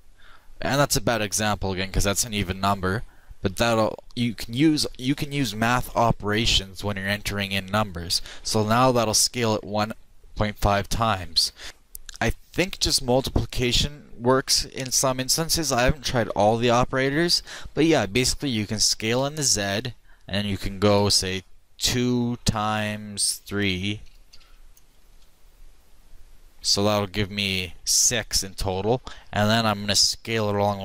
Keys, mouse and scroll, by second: 18.9 s, 30.4 s.